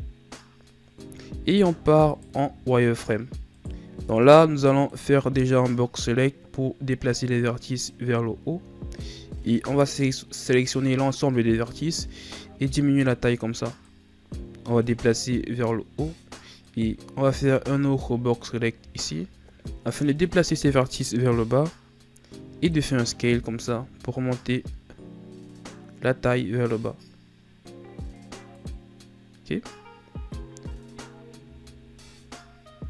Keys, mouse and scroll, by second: 2.1 right click, 2.4 z, 3.4 right click, 3.8 b, 6.0-8.3 drag, 8.3 scroll down 1, 9.0 a, 9.6 a, 11.6 s, 14.8-16.6 drag, 16.6 right click, 17.2 b, 19.0 scroll down 2, 19.8-22.8 drag.